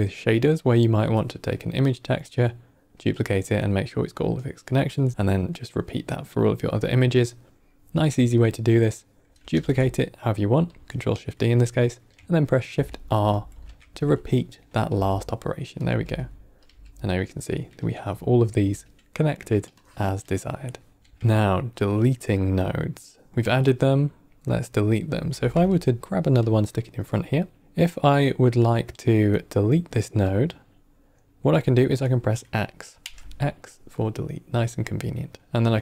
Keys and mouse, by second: 8.7 click, 9.4 ctrl+shift+d, 12.6 shift+r, 13.0 shift+r, 13.4 shift+r, 14.3 middle click, 14.8 g, 15.7-16.2 drag, 15.8 g, 16.5-17.1 drag, 17.0 g, 18.1 ctrl+middle click, 19.7-20.6 drag, 20.9 x, 21.1 ctrl+middle click, 21.9-23.0 drag, 24.0 middle click, 25.2 shift+d, 26.3-26.9 drag, 27.6 click, 30.2-31.0 drag, 31.4 click, 32.9 typing, 35.4-35.8 drag.